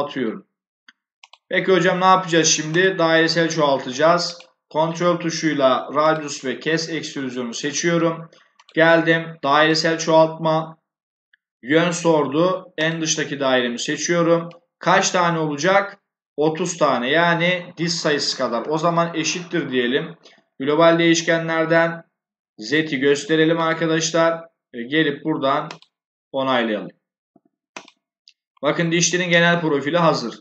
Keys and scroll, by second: 18.5 shift+0.